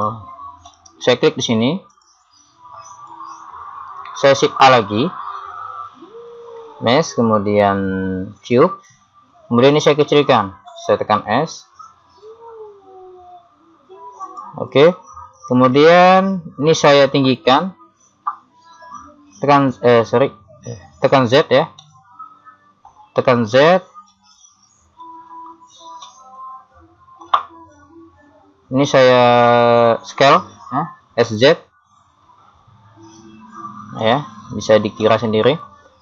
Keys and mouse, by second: 0.7-1.9 middle drag, 1.9 click, 5.8 shift+a, 10.8 s, 16.8 middle click, 17.8 KP_3, 19.5 x, 21.4 z, 23.5 z, 24.3 z, 25.0 KP_3, 31.3 s, 35.1-36.0 middle drag.